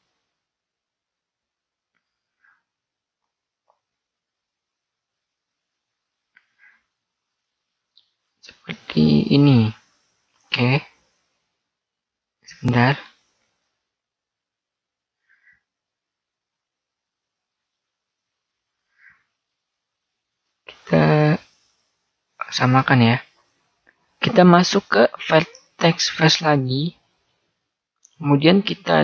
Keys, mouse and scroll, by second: 3.9 ctrl+r, 12.1 ctrl+z, 13.4 ctrl+r, 25.1 click, 26.7-29.0 middle drag, 26.7-28.1 right drag.